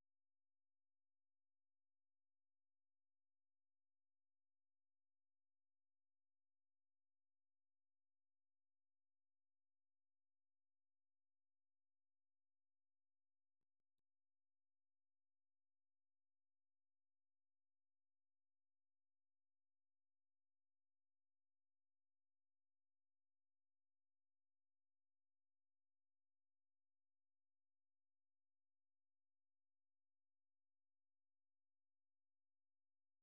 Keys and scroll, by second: 0.0-18.3 typing, 19.8 k, 20.1 k, 25.2-26.7 j, 27.4-29.2 k.